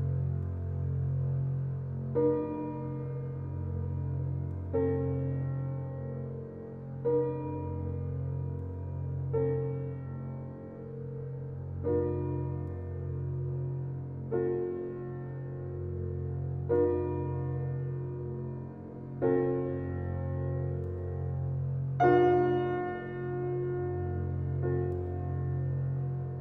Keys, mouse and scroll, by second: 0.3 alt+middle click, 1.3 shift+middle click, 1.7 click, 2.8 p, 3.5 Tab, 3.8 click, 4.2 alt+z, 4.4 middle click, 4.9 Tab, 5.5 ctrl+r, 10.0 ctrl+r, 11.7 Tab, 15.0 click, 15.3-16.2 scroll down 8, 16.2-16.9 middle drag, 16.9 click, 17.1-17.7 scroll up 6, 17.7-18.6 middle drag, 18.6 click, 19.0 shift+click, 19.6-21.0 middle drag, 21.0 s, 22.3-23.0 middle drag, 23.0 click, 23.2-23.6 scroll up 4, 23.6-24.7 middle drag, 24.7 click, 25.1 g.